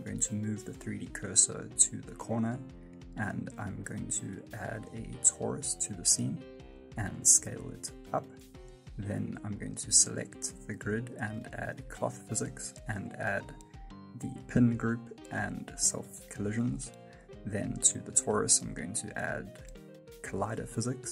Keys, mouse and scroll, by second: 0.0 shift+s, 1.6 middle click, 2.7 Tab, 3.3 click, 7.7-8.1 scroll down 2, 8.1 s, 9.6 right click, 19.6 F9, 20.4 space.